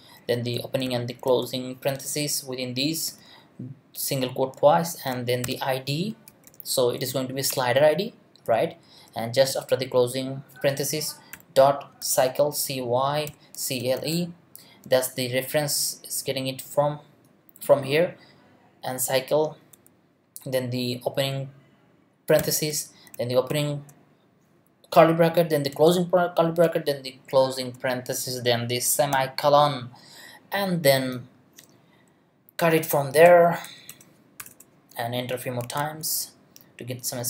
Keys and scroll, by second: 4.7 Left, 5.4-6.9 typing, 7.5 Return, 8.4 Right, 11.3 ., 12.0 c, 13.0-14.5 typing, 22.4 shift+9, 23.5 shift+[, 25.7 shift+], 27.4 shift+0, 32.6 Return, 34.4 BackSpace.